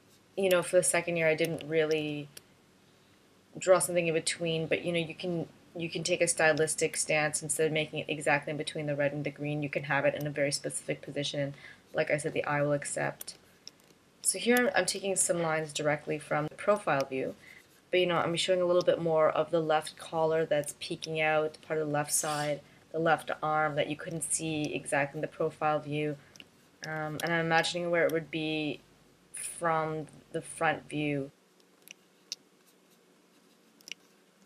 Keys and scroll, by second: 0.4 space, 1.5 space, 2.5 space, 7.1 space, 10.2 space, 13.3 space, 14.8 space, 15.5 space, 27.4 space, 28.1 space.